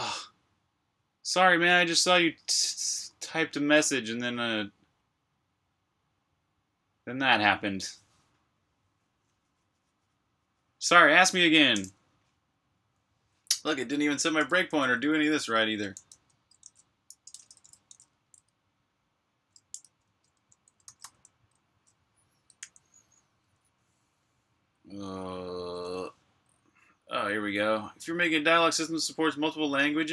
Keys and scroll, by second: 13.2 k, 14.3 BackSpace, 15.7-17.5 typing, 17.8 Return, 19.6-21.4 typing, 20.2 Return, 22.5 super+j.